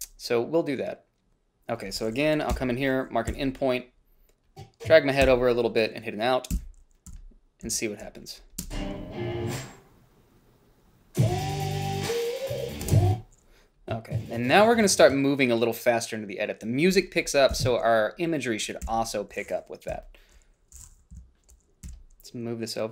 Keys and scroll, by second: 2.7 Up, 3.5 i, 5.5 o, 6.7 b, 8.8 space, 13.0 space, 17.8 Left, 19.1 g, 20.1 =, 21.4 -, 22.1 h.